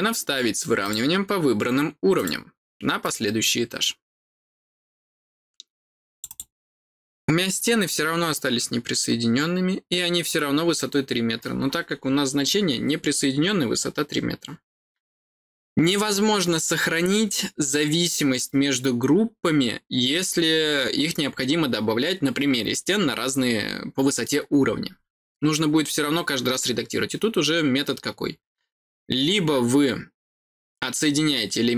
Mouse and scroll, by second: 0.7 click, 2.1 click, 2.9 click, 6.1 click, 6.2 click.